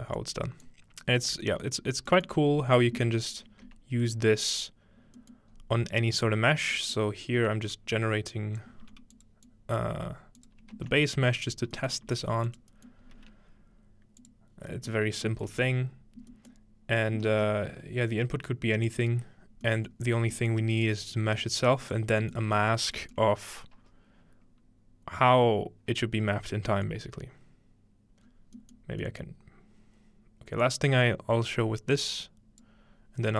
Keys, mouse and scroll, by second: 1.2-2.1 scroll down 3, 1.5 middle click, 2.5 scroll up 2, 5.5 scroll up 2, 6.6 scroll down 2, 7.7-10.9 drag, 8.9 g, 10.0-10.8 typing, 12.1 g, 12.5 click, 12.7-13.2 scroll up 1, 15.5 space, 18.9 click, 19.3-20.9 scroll down 3, 20.9-22.8 drag, 21.3 g, 22.1 scroll down 2, 22.2-23.0 scroll up 4, 28.2-30.4 scroll down 2, 30.6-32.7 drag.